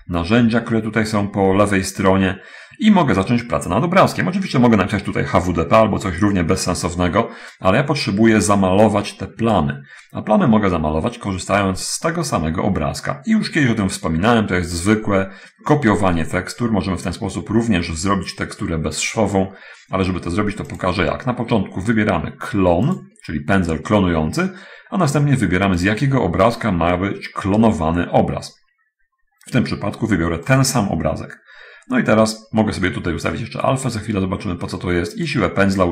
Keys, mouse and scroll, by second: 0.2 t, 13.8-14.8 middle drag, 15.3 middle click, 21.1 click, 23.3 click, 26.2 click, 35.6-35.9 drag.